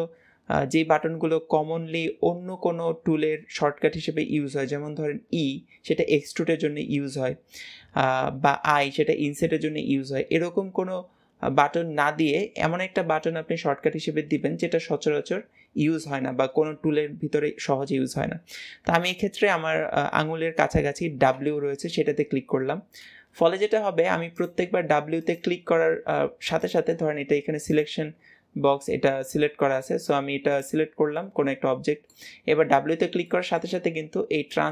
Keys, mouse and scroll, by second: 23.6 middle click, 24.2 click, 25.0 click, 25.9 w, 26.4 click, 27.6-29.3 drag, 29.3-30.4 middle drag, 30.4 click, 31.0-32.5 middle drag, 32.5 w, 33.1-34.7 middle drag.